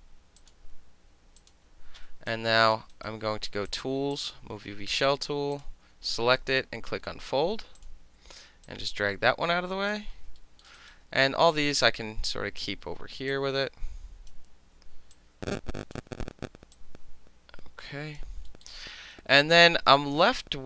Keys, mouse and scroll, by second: 0.4 click, 1.4 click, 2.3 alt+click, 2.9 alt+right click, 3.4 middle click, 3.7 click, 3.8 middle click, 4.1 click, 4.2-5.0 middle drag, 5.0 click, 5.0-5.5 middle drag, 5.5 click, 5.6 middle click, 7.8 click, 8.6-9.9 drag, 10.4 alt+middle click, 10.6 alt+middle click, 10.8 alt+click, 10.9-11.8 alt+middle drag, 11.8-12.6 drag, 12.6-13.3 middle drag, 13.3-14.3 drag, 14.3-15.1 middle drag, 15.1-15.9 drag, 15.9-16.7 middle drag, 16.7-18.2 drag, 18.2-18.5 alt+middle drag, 18.6-19.1 alt+middle drag, 19.3-20.4 alt+middle drag, 20.4 alt+right click.